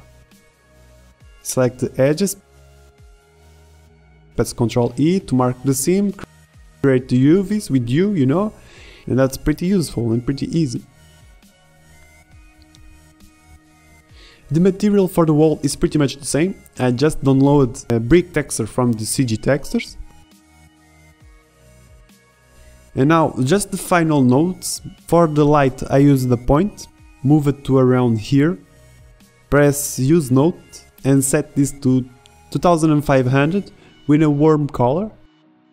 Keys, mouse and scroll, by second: 0.9 Tab, 1.0 a, 1.3 z, 2.5 ctrl+z, 4.5 ctrl+z, 5.8 ctrl+z, 6.5 ctrl+e, 6.7 a, 6.8 a, 7.0 u, 7.3 Tab, 7.5 shift+z, 13.1 z, 14.3 Tab, 15.2 ctrl+e, 15.4 a, 15.5 a, 15.5 u, 16.5 l, 16.8 click, 16.8 shift+a, 17.3 click, 17.4 shift+a, 20.4 Tab, 20.8 n, 21.8 a, 22.0 ctrl+Tab, 22.1 g, 22.3 g, 22.5 ctrl+shift+Tab, 23.1 ctrl+Tab, 23.3 g, 23.3 shift+z, 24.2 z, 26.8 KP_7, 27.5 KP_5, 28.4 g, 33.4 KP_0.